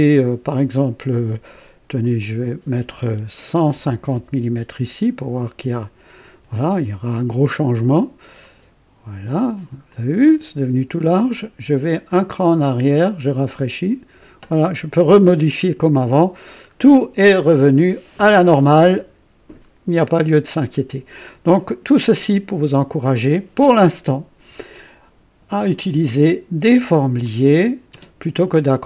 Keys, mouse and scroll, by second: 2.0 click, 3.6 KP_1, 3.8 KP_5, 4.1 KP_0, 4.4 Return, 8.4 click, 9.9-11.0 drag, 12.1 click, 13.4 click, 15.5-16.2 drag, 16.4 scroll down 2, 17.3-22.4 drag, 26.2 click, 26.6 space, 27.2 click, 27.9 typing.